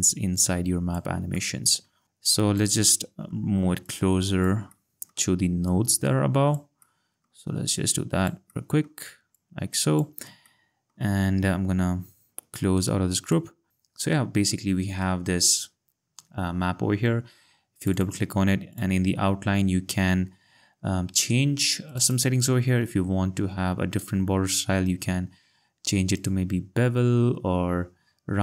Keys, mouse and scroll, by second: 3.8 click, 6.8 click, 7.7 click, 9.3 click, 10.4 click, 10.9 click, 11.5 ctrl+scroll, 13.7 click, 15.1-17.1 ctrl+scroll, 17.5 scroll, 19.0 click, 21.9 click, 26.2 click.